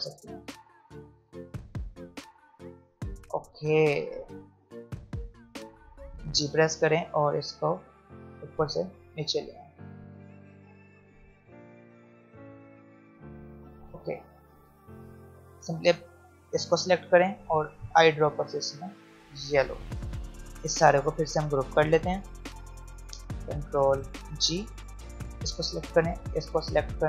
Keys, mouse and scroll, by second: 6.3 g, 8.2-12.9 drag, 12.9 v, 13.4 click, 14.0 alt+scroll up 1, 14.8 alt+scroll down 1, 15.9-17.9 drag, 17.9 i, 18.8 click, 19.7 v, 20.2-24.1 drag, 24.1 ctrl+g, 25.9 shift+click.